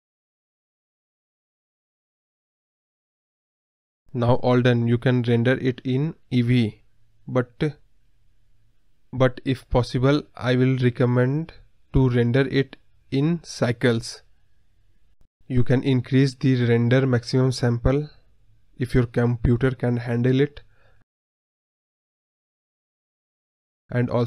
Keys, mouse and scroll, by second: 6.4-8.0 drag, 8.8-10.4 drag, 14.3-16.9 drag, 23.4-24.2 drag.